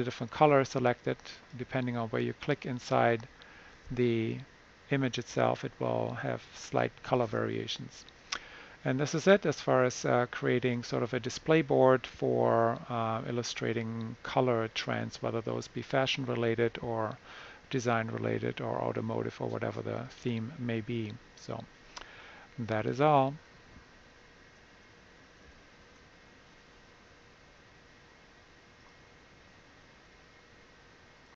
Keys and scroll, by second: 25.4 shift+super+1.